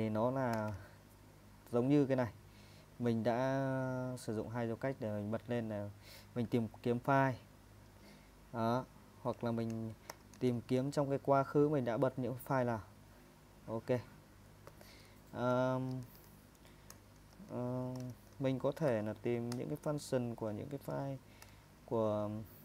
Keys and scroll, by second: 0.5 space, 7.5 Escape, 10.1-10.5 typing, 13.4 Escape, 14.8-18.9 typing, 19.5 Return, 20.6-22.4 typing, 22.4 Escape.